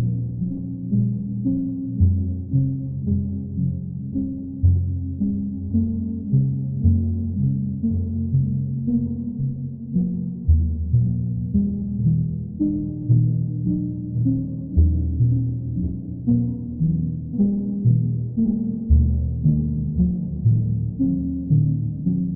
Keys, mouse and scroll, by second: 0.9 alt+click, 1.4 alt+click, 14.7 alt+click, 15.4 alt+click, 19.9 alt+click, 20.8 alt+click.